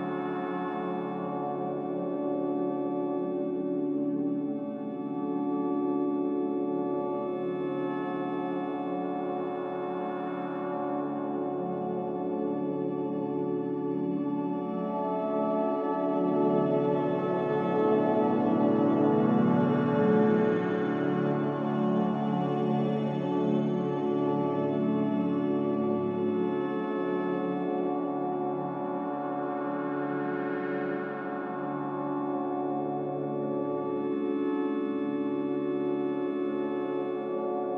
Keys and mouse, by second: 3.1 alt+z, 3.7 alt+z, 4.9 1, 7.1 click, 8.7-9.3 drag, 9.6 g, 11.9 click, 13.4 g, 19.2-19.5 drag, 19.7 g, 21.3 click, 21.6 g, 23.7 click, 24.2 g, 26.3 click, 26.8 g, 28.5 middle click, 29.7 middle click, 30.3-31.4 middle drag, 32.5 middle click, 33.5 Tab, 34.0 Tab, 35.7 shift+middle click, 37.3 middle click.